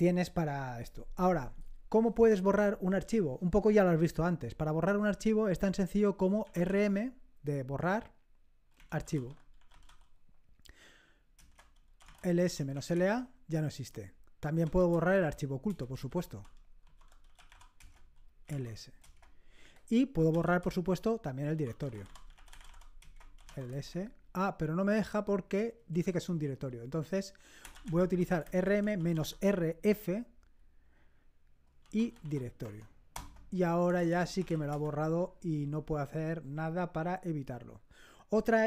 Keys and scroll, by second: 6.2-7.0 typing, 8.5-10.3 typing, 11.4 Return, 11.8-13.2 typing, 14.4-24.2 typing, 25.9 BackSpace, 26.1 BackSpace, 26.3 BackSpace, 27.4-30.6 typing, 31.6-35.2 typing, 33.1 Return.